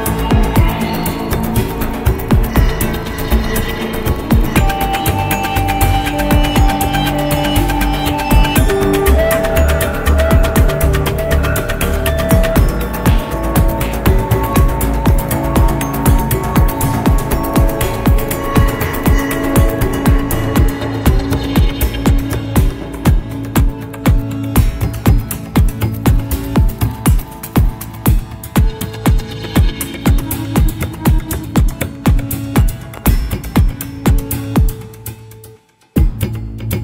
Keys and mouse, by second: 3.3 click, 9.2 g, 12.8-13.4 shift+middle drag, 14.3-18.5 middle drag, 19.7-20.8 shift+middle drag, 21.1-25.5 middle drag, 26.6 click, 27.5-28.3 shift+middle drag, 29.5 middle click, 30.3-31.1 shift+middle drag, 32.0-33.5 drag, 35.7-36.5 middle drag.